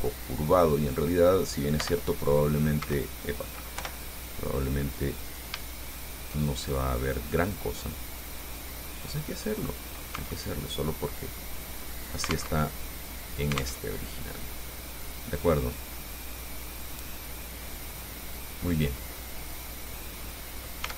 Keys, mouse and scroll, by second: 1.3 click, 2.0 i, 3.0 Escape, 4.0 o, 5.5 right click, 6.1 shift+right click, 6.8 shift+right click, 7.8-10.0 drag, 10.4 Tab, 10.7 scroll down 1, 11.0 click, 11.0-12.8 middle drag, 12.8 alt+Tab, 14.0 alt+Tab, 15.8-16.1 scroll up 2, 17.1-19.1 drag, 19.2 scroll up 2, 19.7 scroll down 2.